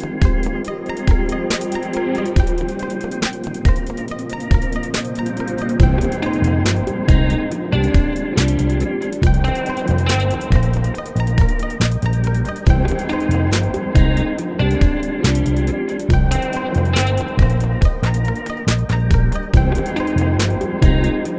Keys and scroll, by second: 1.1 ctrl+e, 2.7 ctrl+e, 3.8 ctrl+e, 8.1 ctrl+e, 10.5 ctrl+e, 11.8 ctrl+e, 13.3 alt+z, 14.0 alt+z, 15.0 ctrl+r, 15.3 Escape, 15.8 ctrl+e, 16.9 ctrl+e, 17.9 ctrl+e, 19.3 ctrl+r, 19.6 Escape.